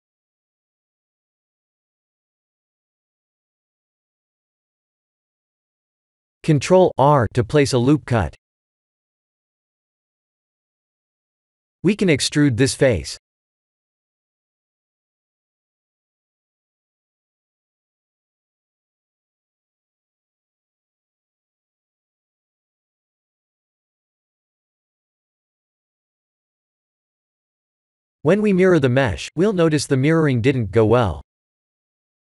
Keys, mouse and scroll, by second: 2.8 middle click, 3.1 middle click, 3.2 middle click, 3.3 middle click, 3.5 middle click, 4.0 middle click, 4.5 middle click, 5.4 Tab, 6.6 ctrl+r, 9.2 middle click, 9.8 middle click, 10.6 3, 10.9 click, 11.3 middle click, 12.3 e, 15.9 middle click, 16.6 scroll down 4, 17.0 middle click, 18.1 middle click, 18.4 middle click, 19.4 middle click, 21.2 middle click, 21.8 middle click, 22.0 middle click, 22.1 middle click, 22.7 middle click, 22.8 middle click, 23.0 middle click, 23.8 middle click, 25.0 middle click, 25.5 Tab, 27.6 click, 28.3 click, 31.2 click, 31.9 click.